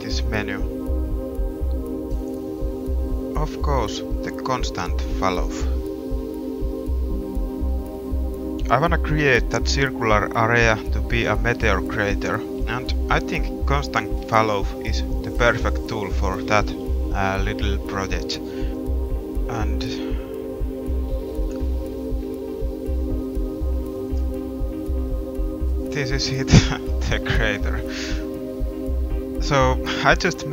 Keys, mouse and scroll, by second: 0.6 Tab, 8.8 g, 9.1 middle click, 9.7 middle click, 11.7 click, 11.8 middle click, 11.9 click, 12.6 middle click, 13.9 g, 20.5 middle click, 22.3 middle click, 22.9 g, 24.3 click, 24.6 g, 26.5 middle click, 27.9 a, 28.0 Tab, 29.6 middle drag, 30.0 middle click.